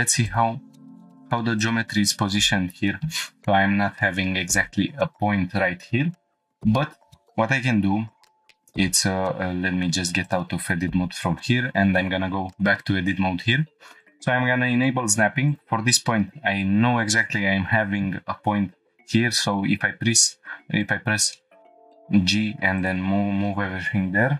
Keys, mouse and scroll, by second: 0.3 click, 1.0 Tab, 1.6 click, 2.0 Tab, 9.2 1, 9.2 Tab, 10.2 click, 11.4 Tab, 14.0-14.5 drag, 15.5 click, 19.3 g, 20.8 click, 21.3 shift+middle click, 22.8-24.2 drag.